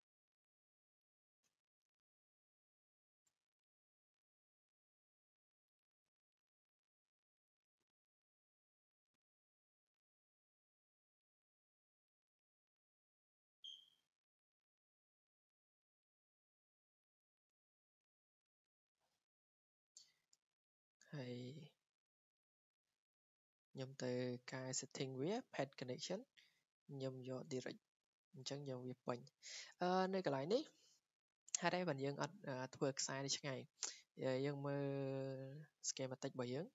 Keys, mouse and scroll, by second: 0.5 click, 4.3 click, 5.7 click, 6.3-6.9 scroll down 5, 6.9-7.5 scroll, 10.4 scroll, 11.0 scroll down 7, 11.9 click, 12.6-13.0 scroll down 2, 15.3 click, 15.4 scroll, 17.0 click, 17.3 right click, 18.4 Escape, 18.9 Escape, 19.3 click, 20.1 click, 20.7 click, 21.0 Escape, 21.1 right click, 21.4 click, 22.2 click, 22.9 click, 26.1 click, 27.4 click, 28.8 Escape, 29.2-29.6 scroll, 29.6 scroll down 3, 31.0-31.3 scroll up 2, 34.2 click, 34.2 scroll, 35.5 click, 35.5 scroll up 2.